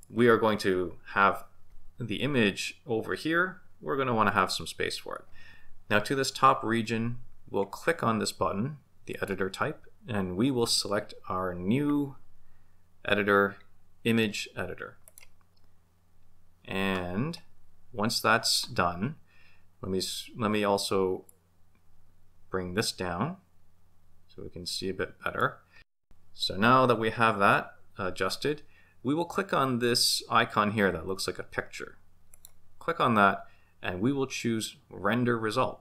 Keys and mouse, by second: 9.3-15.2 drag, 21.4-25.5 drag, 32.4 click, 33.4-35.8 drag.